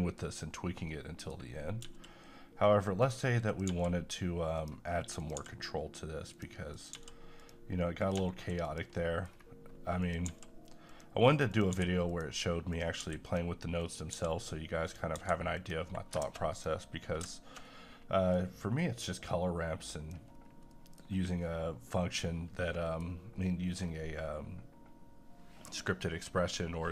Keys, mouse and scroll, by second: 0.9 middle click, 1.8 g, 3.0 click, 3.7 g, 4.6 click, 5.4 g, 6.3 click, 6.9 g, 7.4 click, 8.1 g, 8.6 click, 9.0 middle click, 9.2 scroll down 1, 10.0 click, 10.3 g, 10.8 click, 11.7 g, 12.0 click, 13.0 g, 13.2 click, 14.4 click, 15.1 g, 15.6 click, 16.5 click, 18.3-20.3 drag, 20.3 scroll down 1, 20.7 middle click, 23.7-25.6 scroll up 1.